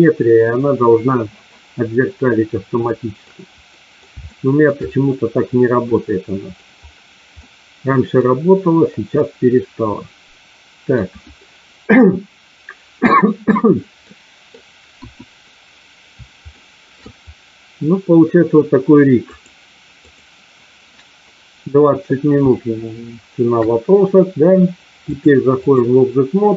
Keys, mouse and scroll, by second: 1.9-3.2 middle drag, 3.7 middle click, 4.2 shift+middle click, 5.9 middle click, 7.4 middle click, 9.0-10.9 middle drag, 14.0 middle click, 14.9 KP_1, 16.5 shift+middle click, 22.5-23.5 shift+middle drag, 25.0 click.